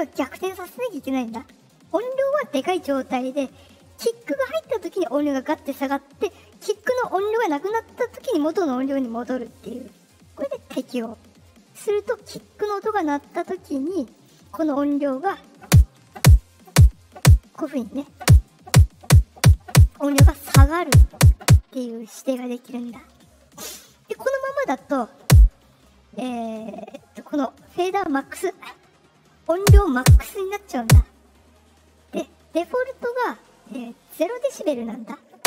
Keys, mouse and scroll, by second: 0.2 click, 10.6 click, 13.1 click, 14.1 click, 23.7-24.3 drag, 32.4 right click, 32.9 click.